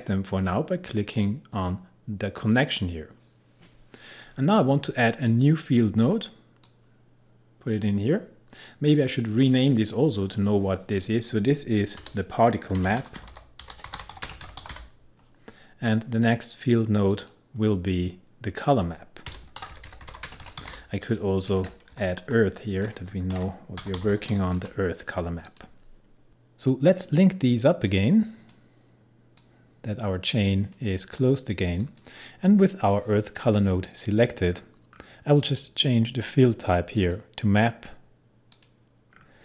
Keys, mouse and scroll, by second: 2.4 click, 5.8-8.9 drag, 12.0 Return, 12.5-15.2 typing, 15.9 click, 19.3 Return, 19.3-21.6 typing, 21.9 Left, 23.1-24.8 typing, 25.5 click, 27.8-31.8 drag, 36.8 scroll down 1, 37.0 click, 39.1-39.4 scroll down 1.